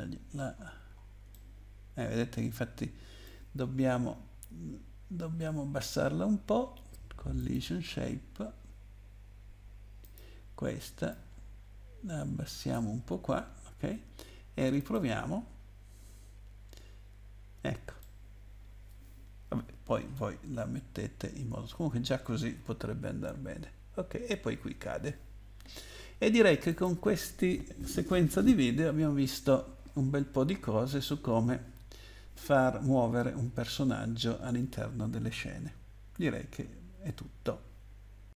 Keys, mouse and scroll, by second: 0.3 scroll up 2, 1.3 middle click, 3.6 scroll down 2, 7.4 click, 10.0 click, 11.1 click, 14.8 click, 18.0 middle click, 19.7 w, 20.6 Up, 21.5 Up, 22.5 Down, 23.1 Down, 25.6 Escape, 26.7 click.